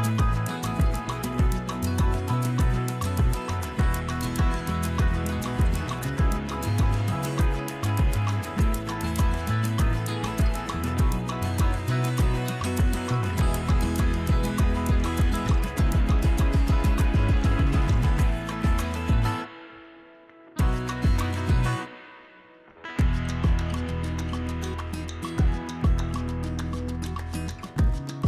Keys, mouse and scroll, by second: 1.7 KP_3, 2.8 r, 5.0-5.3 shift+middle drag, 5.3 click, 5.6 g, 6.9 z, 7.5 shift+drag, 7.9 z, 8.4 Tab, 9.5 click, 10.2 g, 11.3 r, 12.5 ., 13.3 r, 14.5 g, 15.7 r, 16.4 Tab, 16.8 middle click, 17.1 Tab, 17.9 click, 18.7 KP_3, 19.3 drag, 20.9 click, 21.5 drag, 22.1 g, 23.9 click, 24.5 g, 25.6 Tab, 26.0 middle drag, 26.3 shift+middle drag, 27.0 shift+middle drag, 28.0 q.